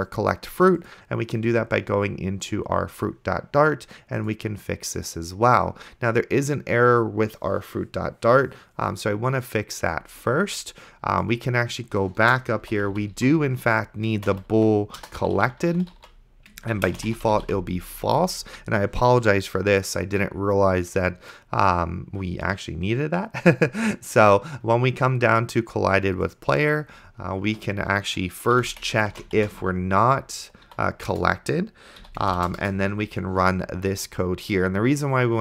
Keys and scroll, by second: 12.4-18.1 typing, 27.7 Return, 28.3-30.7 typing, 31.2 Return, 32.1 End, 32.7 Return.